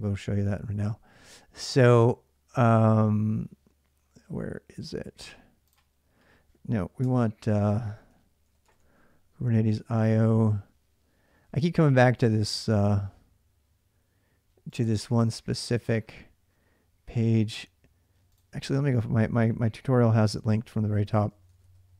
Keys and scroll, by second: 0.0-0.2 typing, 6.8-9.0 typing, 19.7-21.9 typing.